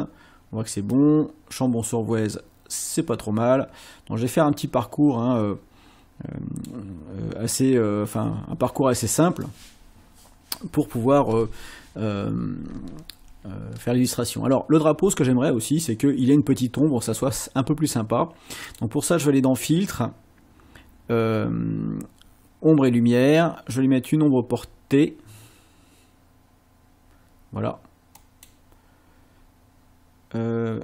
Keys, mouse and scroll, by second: 0.9-6.8 drag, 18.7 click, 28.2 click.